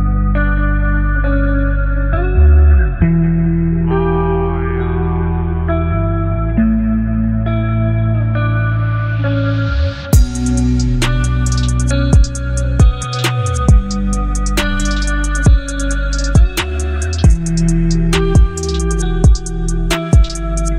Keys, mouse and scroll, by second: 0.8 alt+scroll up 1, 1.9-6.6 drag, 8.3 alt+BackSpace, 9.5 ctrl+d, 10.4 space, 12.5-12.9 alt+scroll up 2, 15.3-16.9 drag, 18.3 alt+BackSpace, 19.5 ctrl+d, 20.3 v.